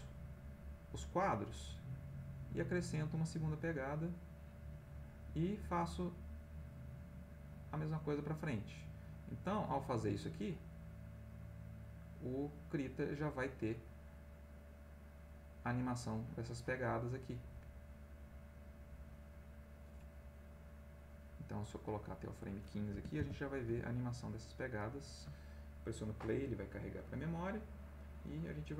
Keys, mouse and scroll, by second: 1.5 click, 3.3-4.8 drag, 5.6 click, 7.1 click, 9.1-9.7 drag, 10.4 click, 11.9 click, 13.3 click, 14.6 click, 16.1 click, 17.4-18.8 drag, 22.1 click, 22.9 1, 23.2 5, 23.7 Tab, 24.3 click.